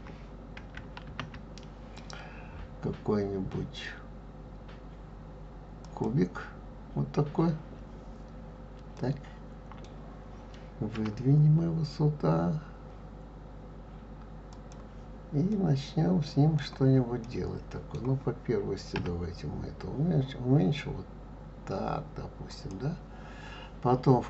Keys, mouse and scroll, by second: 1.1 shift+a, 8.9-10.9 middle drag, 10.9 g, 15.5 scroll up 1, 15.5-18.9 middle drag, 18.9 s.